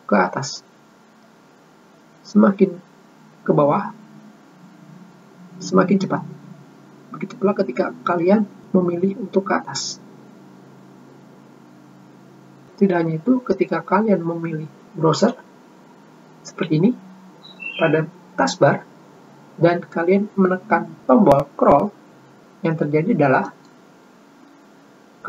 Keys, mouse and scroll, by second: 24.2 middle click.